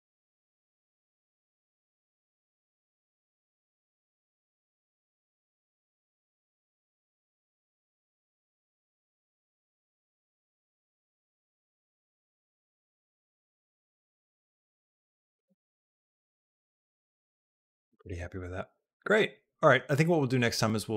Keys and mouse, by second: 14.0 space, 15.4 ctrl+s, 16.1 middle click, 17.6 middle click, 18.4-20.9 drag.